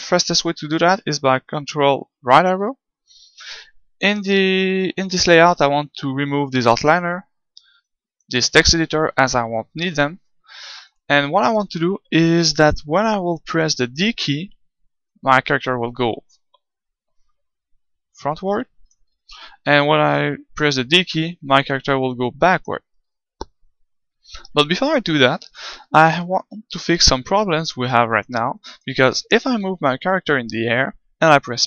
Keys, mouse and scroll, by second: 2.3 ctrl+Right, 4.4-6.1 drag, 7.8-9.8 drag, 9.8 KP_1, 10.8-12.5 middle drag, 12.5-14.8 right drag, 15.0-16.9 drag, 19.1 ctrl+z, 21.7-23.5 drag, 22.9 ctrl+z, 24.6-26.4 middle drag, 26.7 g, 28.2-30.1 drag, 30.1 middle click.